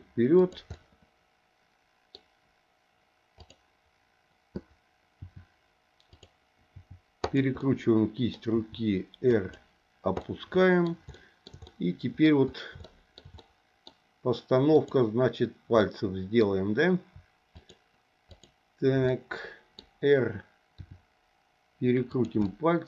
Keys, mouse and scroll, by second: 0.7-2.2 middle drag, 3.4 click, 5.2 r, 6.7 r, 7.6 middle click, 8.5 r, 10.2 middle click, 11.1 shift+middle click, 11.7 middle click, 12.8 shift+middle click, 13.4 middle click, 14.7 click, 15.8 middle click, 17.6 shift+click, 19.1 middle click, 20.8 r, 22.4-22.8 middle drag.